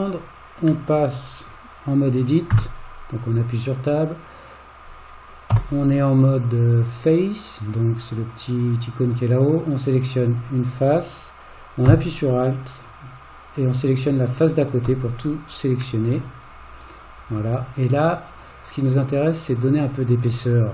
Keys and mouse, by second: 0.9-1.5 middle drag, 2.5 Tab, 5.5 3, 7.8 click, 16.0-20.7 middle drag.